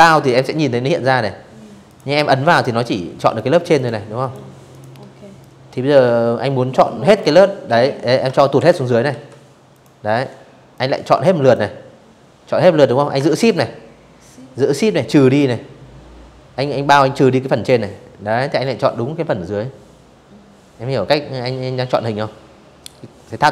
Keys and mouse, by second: 0.1 click, 0.9 click, 1.4 click, 1.8 click, 2.4 click, 3.1-4.8 drag, 6.2 ctrl+shift+[, 6.8 v, 7.4 click, 8.4 click, 11.9-15.3 shift+drag, 21.0 click, 22.8-23.5 drag.